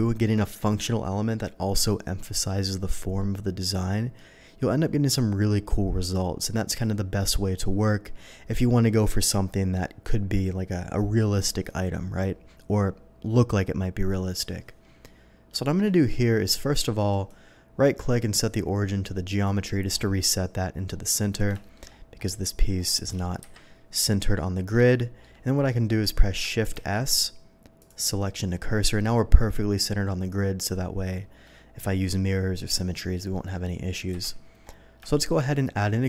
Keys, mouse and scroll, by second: 15.7 shift+middle click, 17.1 shift+right click, 19.3 click, 20.9 middle click, 21.6 shift+middle click, 22.0 shift+middle drag, 23.4-24.4 middle drag, 23.4 KP_3, 24.9-25.2 shift+middle drag, 26.7 shift+s, 27.8 click, 31.4-31.8 middle drag, 32.7 middle click, 33.3 middle drag, 34.1 KP_3, 35.1 shift+middle drag.